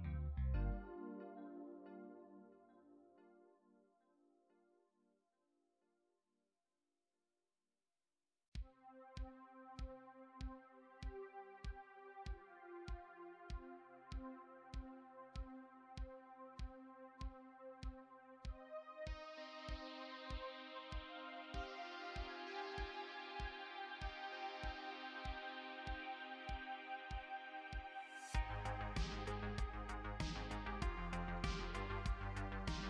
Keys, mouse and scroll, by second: 0.8 x, 6.4 click, 8.3 x, 10.6 click, 14.1 shift+click, 23.5 click, 25.6 shift+click, 28.9 click, 32.2 shift+click.